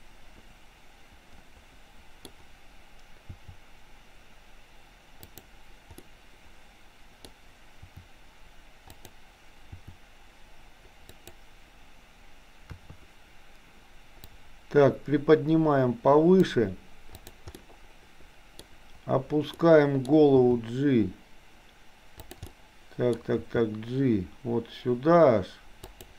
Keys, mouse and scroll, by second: 3.5 r, 6.0-7.4 middle drag, 7.7 r, 9.7 r, 12.6 KP_3, 14.2-16.6 drag, 17.5-18.6 middle drag, 19.6 middle click, 20.5 g, 22.6 middle click, 23.1 scroll down 1, 23.4 g.